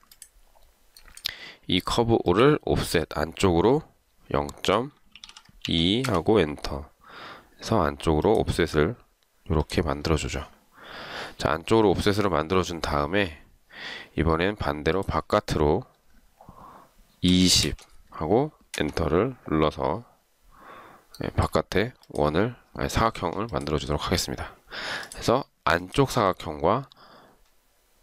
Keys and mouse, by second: 5.0-6.2 typing, 17.2-18.0 typing, 18.9 Return, 23.6 shift+click.